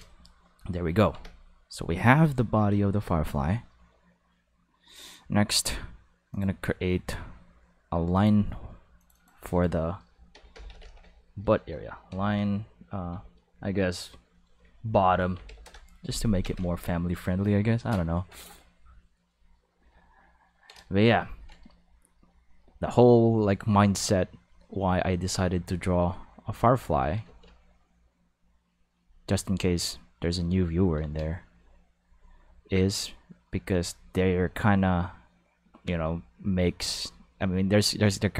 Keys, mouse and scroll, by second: 1.1 ctrl+s, 6.3 click, 8.2 click, 9.0 click, 10.3 shift+l, 10.5 shift+i, 10.7 shift+n, 10.8 shift+e, 12.1 -, 13.1 shift+b, 15.0 o, 15.3 t, 15.5 m, 15.6 Return, 16.4 ctrl+s, 24.1-25.5 drag, 27.3 ctrl+z, 27.9-28.9 drag, 30.1 click, 31.0 ctrl+z, 31.5 click, 32.9 click, 34.8-38.3 drag.